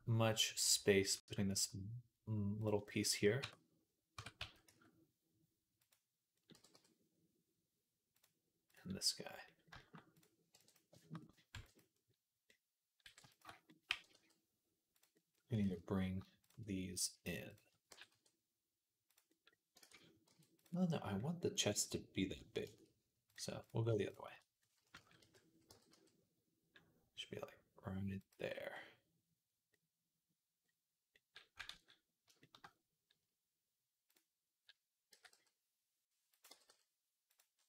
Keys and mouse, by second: 3.2 Tab, 4.0 Tab, 4.2 s, 6.2-9.8 right drag, 6.4 g, 9.3 middle click, 9.6 shift+middle click, 10.4-12.3 drag, 10.4 b, 11.4 b, 12.3 right click, 13.1-15.4 shift+drag, 13.1 b, 13.7 g, 15.5 ctrl+z, 16.6 middle click, 17.7 g, 19.7 ctrl+z, 20.1 g, 20.4-25.0 drag, 25.0 KP_3, 25.5 g, 28.0 click, 28.7 click, 29.3 click, 29.6 click, 30.4 click, 31.4-33.9 ctrl+right drag, 31.6 ctrl+s, 33.9-37.6 drag, 34.9 s, 36.3 g.